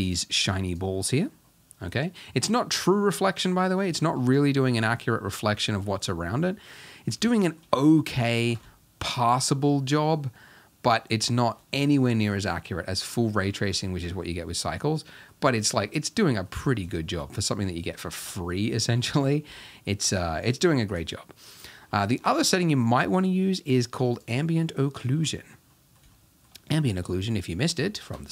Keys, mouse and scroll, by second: 0.1 click, 0.7 click, 4.2-5.4 middle drag, 5.4-6.5 scroll up 1, 6.5-7.7 middle drag, 7.9 scroll up 3, 8.1-10.2 middle drag, 10.2-11.0 scroll down 1, 11.0 middle click, 11.5-11.9 scroll down 1, 12.3-13.2 middle drag, 13.4-19.1 middle drag, 19.1 KP_0, 21.8-22.9 scroll down 4, 22.9-23.9 scroll down 1, 23.9 scroll down 1, 24.2 click, 24.8-25.1 middle drag, 25.1-25.7 scroll up 2, 25.7-26.5 middle drag, 26.5-26.8 scroll up 2, 26.8-27.4 middle drag, 27.4-28.3 scroll up 3, 27.9 shift+middle click.